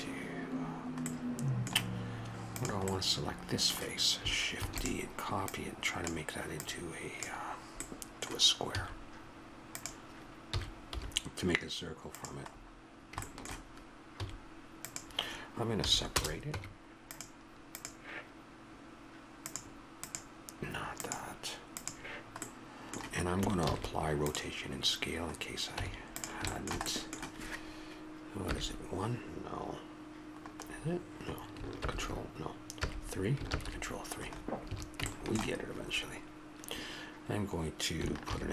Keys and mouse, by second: 2.5-4.4 middle drag, 4.6 shift+d, 5.5-8.4 drag, 8.7 s, 10.5 s, 13.3-15.8 middle drag, 14.1 s, 15.8 p, 16.5 Tab, 22.5 middle click, 23.6 ctrl+a, 25.8 Tab, 28.5 KP_1, 31.8 ctrl+KP_1, 32.7 KP_3, 33.5 ctrl+KP_3, 34.7 a, 38.2 ctrl+r.